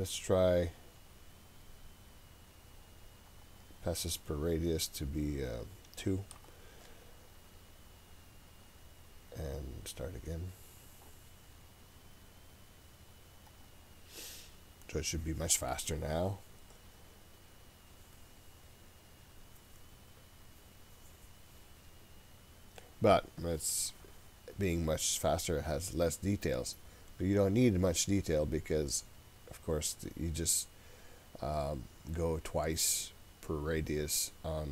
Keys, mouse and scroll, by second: 3.3-9.6 drag, 13.5-21.4 drag, 25.5-27.0 scroll up 3, 27.0 scroll down 2, 29.6-32.2 scroll down 1.